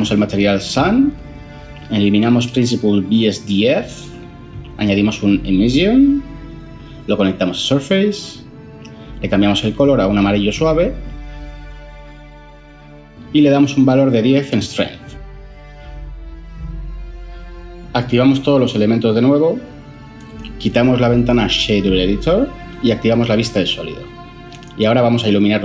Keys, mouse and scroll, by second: 2.6 Delete, 3.4 ctrl+shift+a, 4.1 typing, 13.8 typing, 20.9 n.